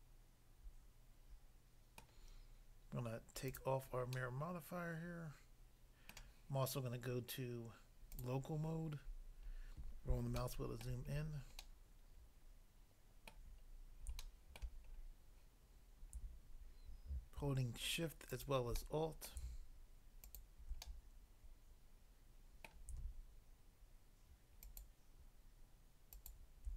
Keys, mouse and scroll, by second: 2.0 middle click, 3.5 click, 4.1 middle click, 6.2 middle click, 8.1 click, 8.3 click, 9.0 scroll up 1, 10.5 shift+middle click, 11.1 scroll up 1, 13.3 middle click, 13.7-14.2 scroll up 1, 14.2 shift+middle click, 14.9 scroll up 1, 18.3 alt+click, 18.7 middle click, 19.3 middle click, 20.2 alt+click, 20.9 middle click, 22.7 middle click, 24.7 alt+click, 24.7 alt+click, 26.1 alt+click.